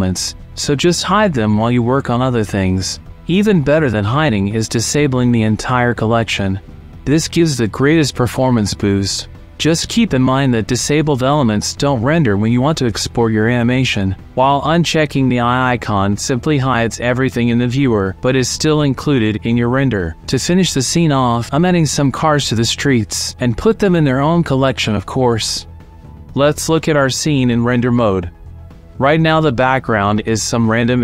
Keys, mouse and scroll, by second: 0.7 click, 2.0 middle click, 4.0 click, 5.8 click, 8.2 click, 8.8 shift+click, 9.2 shift+middle click, 14.8 click, 15.1 alt+g, 15.2 r, 15.2 z, 15.2 KP_9, 15.2 KP_0, 15.4 click, 15.9 middle click, 16.4-18.3 typing, 16.8 middle click, 17.3 alt+g, 17.4 KP_Subtract, 17.4 KP_Enter, 18.2 alt+g, 18.3 KP_Subtract, 18.3 KP_Enter, 19.3 alt+g, 19.4 KP_Enter, 19.4 r, 19.4 z, 19.4 KP_9, 19.4 KP_0, 20.2 click, 21.0 click, 21.2 typing, 21.2 KP_Enter, 21.4 alt+g, 21.4 click, 21.6 click, 21.9-23.0 drag, 23.0 ctrl+click, 23.2 m, 23.6 click, 23.8 ctrl+s, 25.6 click, 27.7-28.9 drag, 29.6 click, 30.4 click.